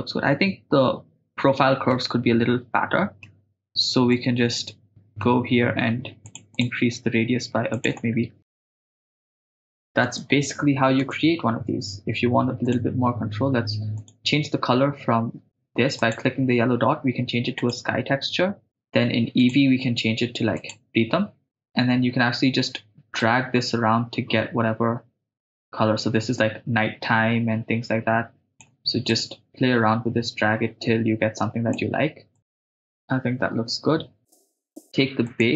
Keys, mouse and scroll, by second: 1.9-3.3 middle drag, 4.1-5.3 middle drag, 6.3 click, 6.6 click, 7.8 click, 8.7 click, 9.0 shift+space, 9.2 scroll down 2, 10.2 shift+space, 11.1 shift+space, 12.6 click, 14.0 click, 16.0-18.7 drag, 19.4-21.5 drag, 23.4-26.3 drag, 26.4-28.7 drag, 29.2-31.8 drag, 32.5-33.0 drag, 34.3-35.3 right drag, 35.3 click.